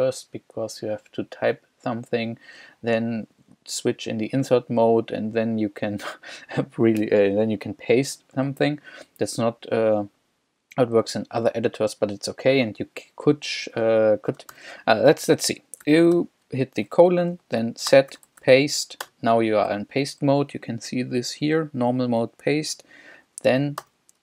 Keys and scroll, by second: 14.5 shift+;, 15.8 s, 16.1 t, 17.9-18.9 typing, 19.0 Return, 23.8 o.